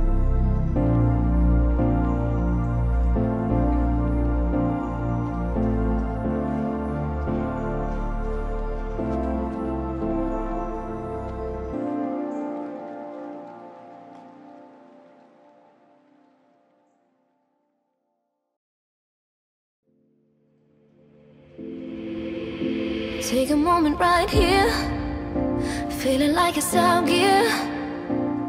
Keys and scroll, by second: 19.5 ctrl+0, 23.3 ctrl+g, 24.5 ctrl+alt+shift+e, 26.4 ctrl+j.